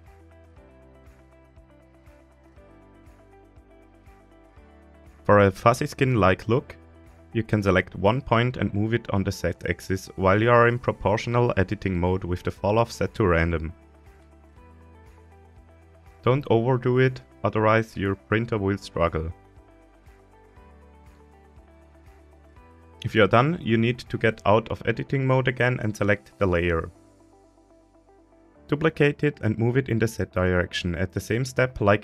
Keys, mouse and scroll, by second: 0.6 right click, 1.3-1.7 scroll up 1, 2.9 KP_7, 4.1 KP_1, 4.9-5.4 shift+middle drag, 7.0 click, 7.9-11.0 drag, 13.7 scroll down 1, 14.8-15.6 scroll down 9, 15.8 scroll up 1, 16.3-18.3 scroll down 1, 21.2-21.7 drag, 21.7-22.4 middle drag, 22.4 scroll down 2, 22.7-23.5 scroll up 1, 23.5 Tab, 24.0 middle click, 25.3 scroll up 1, 27.4 KP_3, 28.5-29.0 scroll up 3, 29.3-30.1 shift+middle drag.